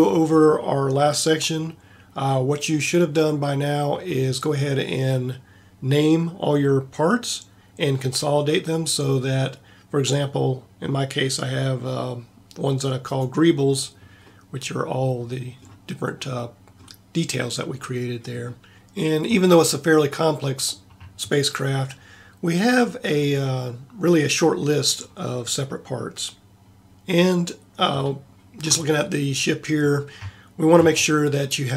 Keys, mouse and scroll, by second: 10.2-13.0 middle drag, 13.0-14.4 drag, 18.7 a, 26.9 a.